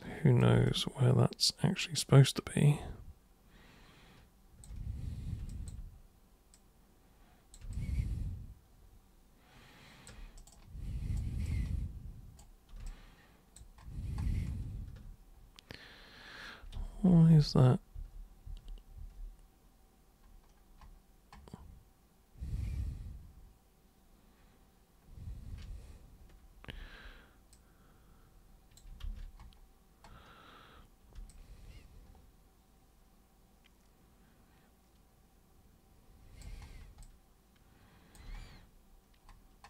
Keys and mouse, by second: 0.6-4.6 alt+super+drag, 5.5 alt+super+click, 6.5 super+click, 7.7-10.0 alt+super+drag, 10.3 super+right click, 10.5 super+right click, 11.4 super+right click, 12.8 alt+super+click, 16.7 ctrl+super+z, 17.1 ctrl+super+z, 17.3 ctrl+super+z, 17.9 ctrl+super+z, 18.4 ctrl+super+z, 18.9 ctrl+super+z, 26.5 super+r, 27.5-28.8 super+drag, 29.0 ctrl+super+z, 31.3-36.4 alt+super+drag, 37.0-38.2 alt+super+drag.